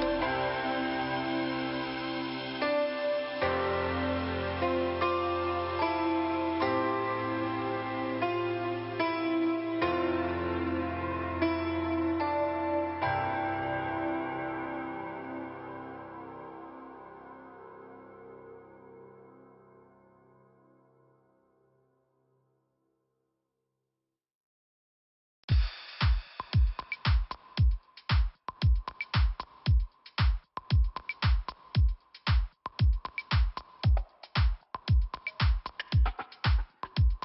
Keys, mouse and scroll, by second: 0.1 click, 0.2 click, 1.3 click, 2.4 click, 4.1 click, 5.4-5.9 scroll up 1, 5.9 middle click, 6.4 click, 7.3 click, 8.3 click, 9.7-10.1 scroll down 1, 13.3 click, 14.5 click, 14.7 click, 15.8 click, 18.3 click, 22.7 click, 22.7 click, 23.4 click, 25.3 click, 32.4 click, 32.5 click, 33.5 click.